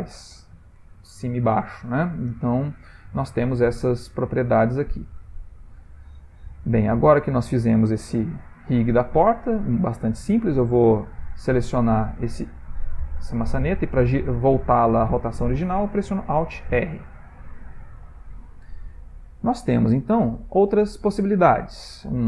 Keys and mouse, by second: 2.4 ctrl+middle click, 3.8 ctrl+middle click, 5.6 click, 6.4 click, 7.2 click, 8.6 ctrl+middle click, 9.3 click, 10.9 click, 13.2 middle click, 16.6 alt+r, 17.4 ctrl+middle click, 17.5 ctrl+middle click, 17.8 ctrl+middle click, 18.1 shift+middle click, 18.2 ctrl+middle click, 19.1 ctrl+middle click, 19.4 shift+middle click, 19.5 shift+middle click, 19.6 shift+middle click, 20.1 ctrl+middle click, 20.9 shift+middle click.